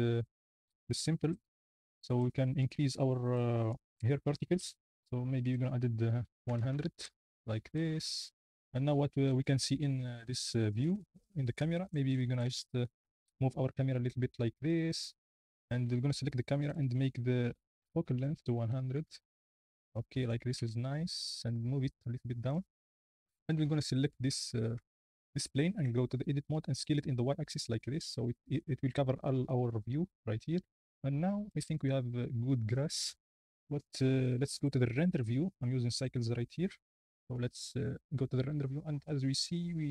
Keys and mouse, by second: 5.5-6.6 middle drag, 6.6 KP_0, 7.0 middle click, 12.3 g, 12.5 z, 16.7 click, 18.2-19.5 drag, 19.1 KP_0, 20.4 g, 20.5 z, 22.5 click, 22.9 click, 24.8 Tab, 25.3 Tab, 25.8 Tab, 26.5 s, 26.8 y, 28.5 click, 29.9 Tab, 36.0-36.5 drag, 37.5 z.